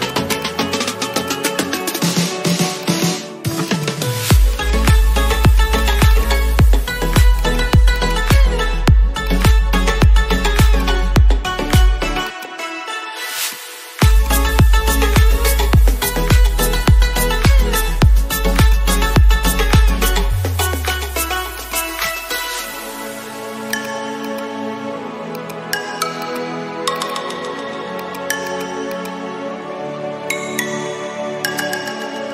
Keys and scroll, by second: 29.9 space.